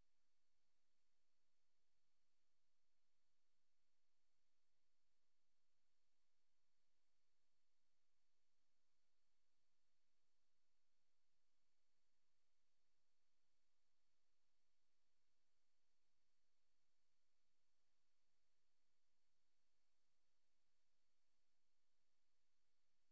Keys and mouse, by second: 0.2 click, 1.2 click, 1.9 click, 2.3 click, 3.7 click, 5.2 click, 9.4 click, 11.3 ctrl+z, 13.3 click, 14.2 click, 14.7 click, 16.2 click, 21.6 Right.